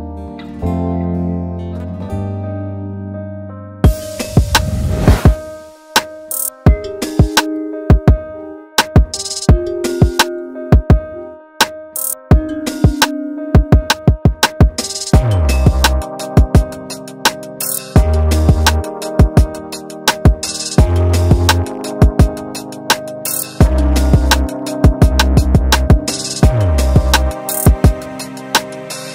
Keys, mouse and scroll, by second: 0.2 Tab, 0.4 scroll down 2, 0.7-1.8 middle drag, 1.8 click, 2.3 alt+a, 2.6-5.6 middle drag, 5.6-5.9 scroll up 2, 5.9-8.1 shift+middle drag, 8.1-9.1 scroll up 1, 10.8-12.5 middle drag, 12.5-12.9 scroll up 2, 12.9 shift+middle click, 13.2-13.9 scroll up 1, 13.9 click, 14.7 Tab, 15.3 click, 16.1 middle click, 16.9 shift+click, 19.9-21.9 middle drag, 21.9 shift+click, 22.0 middle click, 22.7 scroll down 2, 23.0-25.9 middle drag, 25.9 Tab, 26.2 scroll down 2, 26.4 alt+a, 26.6-28.1 middle drag, 28.1-28.7 scroll up 3, 28.7 click, 28.8 Tab.